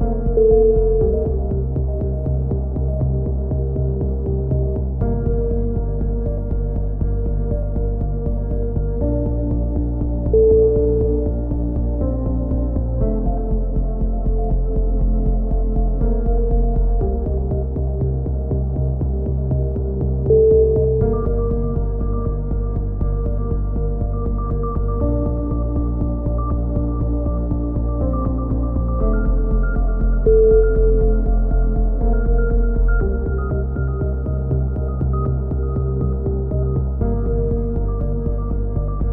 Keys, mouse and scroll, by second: 0.0 click, 1.5 middle click, 2.0 click, 2.6 ctrl+l, 3.1 KP_7, 4.3 s, 5.5 ctrl+z, 5.9 s, 7.7-9.3 middle drag, 7.9 z, 9.7 middle click, 10.4-11.8 drag, 12.3 b, 13.6-15.1 drag, 13.8 z, 15.2 a, 15.7 click, 16.8 click, 17.3 ctrl+l, 18.0 ctrl+n, 18.9 a, 19.4 click, 22.5 middle click, 23.1-24.2 drag, 24.2-25.9 middle drag, 28.4 ctrl+r, 33.8-34.8 drag, 34.8-36.0 right drag, 35.5 KP_3, 35.8 z, 36.5 c, 37.6 e, 38.6 click.